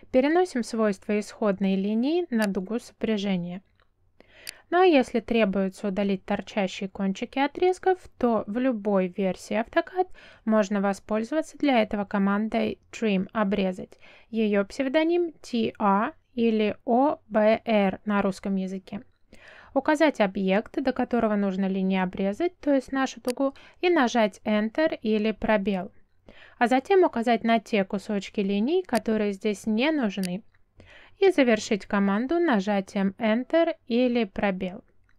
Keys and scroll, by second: 0.3 space, 5.6 space, 14.5 t, 17.8 space, 26.2 Return, 33.2 space.